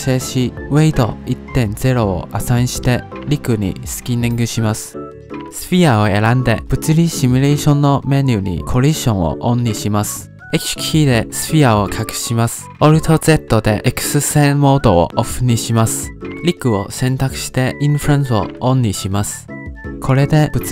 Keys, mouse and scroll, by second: 0.6 middle click, 0.8-1.4 scroll up 3, 0.9 shift+middle click, 1.4 Tab, 2.0 click, 2.5 ctrl+Tab, 3.0 shift+click, 3.6 ctrl+p, 5.3 ctrl+Tab, 6.1 click, 7.2 click, 7.6 click, 9.6-12.1 drag, 12.1 h, 15.1 alt+z, 16.8-17.3 scroll down 1, 17.3 click, 18.2 click, 19.1 click, 19.5-20.0 scroll down 3, 19.7 shift+middle drag, 20.0-20.7 middle drag.